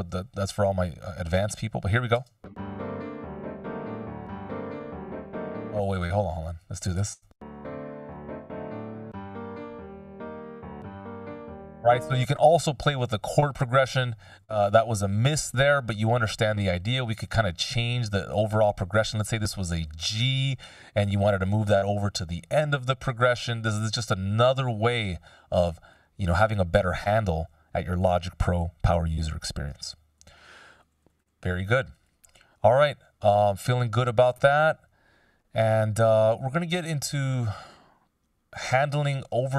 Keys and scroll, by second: 2.3 shift+space, 5.4 space, 7.2 shift+space, 11.6 space, 13.3 super+z, 13.8 super+z, 14.3 super+z, 14.8 super+z, 29.6 super+z, 30.1 super+z, 30.6 super+z, 31.1 super+z.